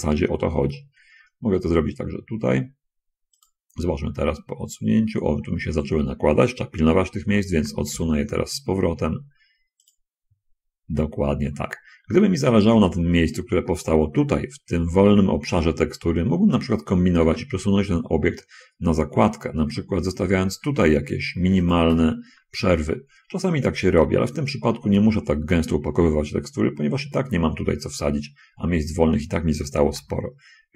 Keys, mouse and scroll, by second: 0.2 g, 3.5 click, 4.0-4.6 scroll up 4, 4.6 scroll down 2, 5.3 middle click, 5.8 middle click, 7.9 g, 7.9 x, 10.2 click, 10.6 scroll, 11.1-11.6 scroll, 13.9 middle click, 16.8 scroll down 2, 17.6 g, 21.8 shift+click, 22.7 shift+middle click, 24.4 scroll down 2, 25.0 scroll down 2, 25.4 scroll up 2, 26.8 scroll up 2, 30.2 g.